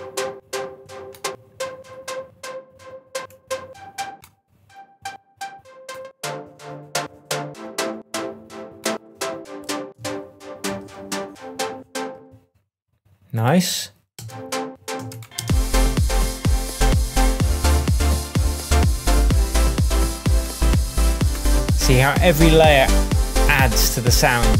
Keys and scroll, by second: 9.9 alt+m, 12.1 space, 14.1 space.